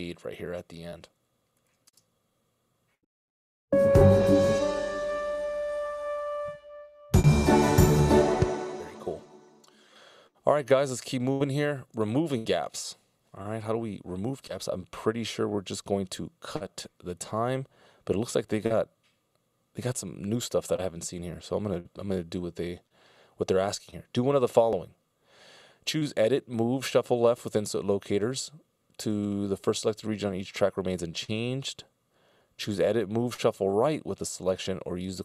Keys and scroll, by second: 2.1 space, 6.4 space.